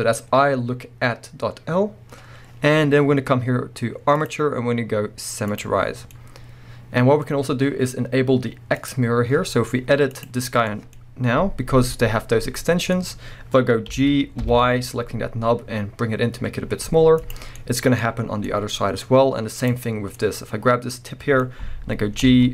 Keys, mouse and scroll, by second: 4.2-6.1 drag, 6.0 scroll down 2, 6.1-8.8 middle drag, 8.8 click, 8.9-10.1 middle drag, 9.3-10.1 scroll up 2, 10.1 click, 10.3-19.6 middle drag, 13.9 g, 17.3 click, 19.0-19.6 scroll up 2, 19.6 click, 20.1-22.5 middle drag, 22.2 g.